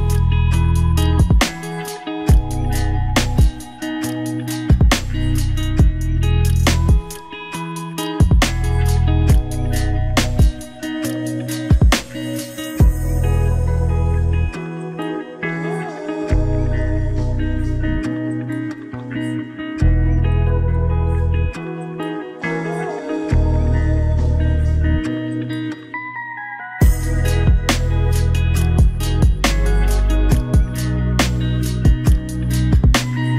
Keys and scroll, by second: 2.1 ctrl+v, 28.0 ctrl+=.